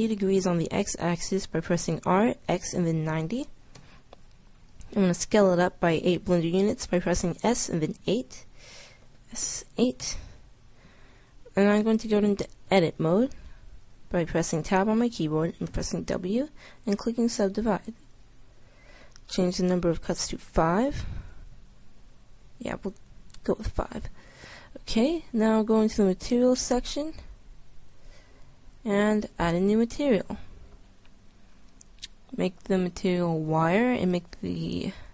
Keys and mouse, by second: 2.0 r, 7.4 s, 7.9 KP_8, 9.0 s, 12.7 Tab, 15.7 w, 23.6 Tab, 27.9-31.0 drag.